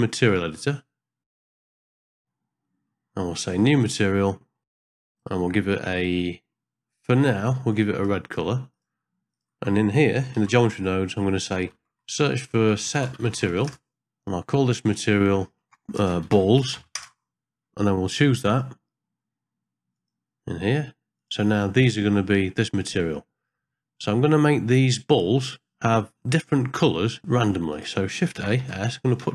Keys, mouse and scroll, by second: 0.1-1.2 drag, 1.4 n, 1.6 click, 2.2 n, 2.9 middle click, 4.0 click, 4.6 middle click, 8.7 click, 9.3 click, 10.5 shift+a, 15.2-17.0 drag, 16.5 l, 18.5 click, 19.9-21.4 drag, 23.3 middle click, 27.7 click, 28.3 shift+a.